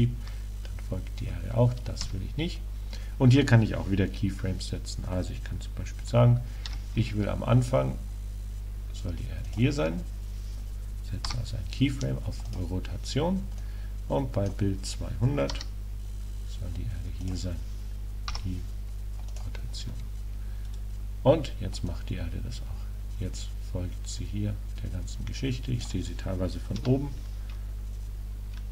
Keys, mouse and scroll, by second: 6.7 r, 9.6-11.3 drag, 11.3 |, 13.7-15.5 drag, 15.6 r, 17.3-19.2 drag, 18.4 i, 20.7 KP_0, 21.9 click, 23.7 click.